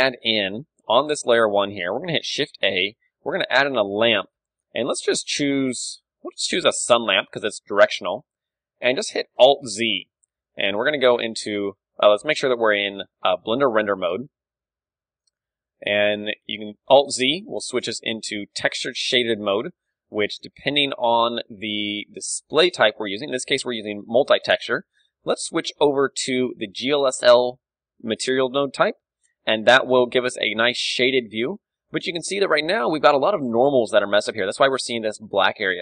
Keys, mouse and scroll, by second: 1.1-3.4 middle drag, 2.3 shift+a, 7.5 middle click, 7.5 g, 8.2-13.9 drag, 8.2 KP_3, 9.1 alt+z, 9.7 r, 10.6 g, 14.3-18.3 middle drag, 16.8-18.4 right drag, 19.1-22.5 drag, 22.6-24.1 drag, 25.3-26.9 drag, 29.2-34.1 middle drag, 29.8 KP_1, 32.1-34.1 right drag.